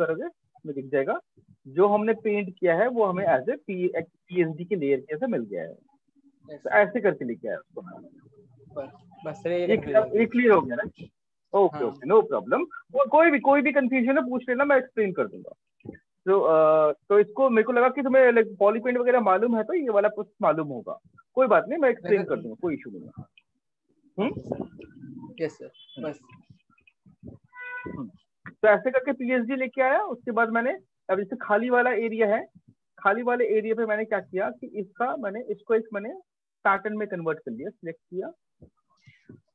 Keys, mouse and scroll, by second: 0.3 ctrl+space, 0.6 ctrl+space, 0.7 ctrl+space, 0.9 ctrl+space, 1.0 ctrl+space, 1.2 ctrl+space, 1.4 ctrl+space, 1.5 ctrl+space, 5.8 ctrl+-, 6.1 ctrl+-, 6.7 ctrl+-, 6.8 ctrl+-, 7.1 ctrl+-, 7.7 ctrl+-, 7.8 ctrl+-, 30.5 click, 31.9 click, 32.5 click, 32.5 click, 32.6 click, 33.2 click, 36.8-37.6 ctrl+click, 37.3 ctrl+click, 38.2 click.